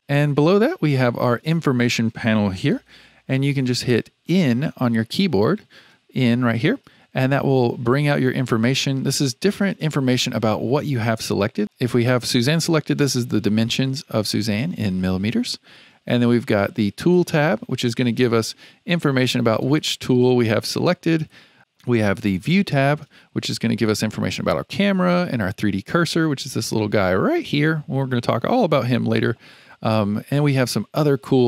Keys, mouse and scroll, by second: 4.2 n, 4.6 n, 5.0 n, 5.4 n, 11.6 click, 16.9 click, 19.7-22.3 drag.